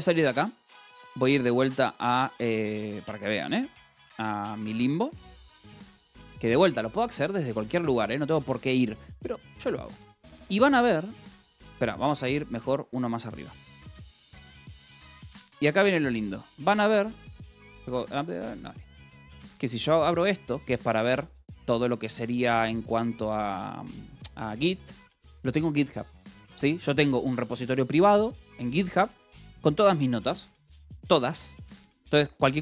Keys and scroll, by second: 1.9-8.2 typing, 12.5-16.4 typing, 12.6 Return, 15.3 Return, 17.7 shift+u, 18.5 q, 19.3 space, 19.5 g, 20.7-22.0 typing, 23.2 k, 31.6 j.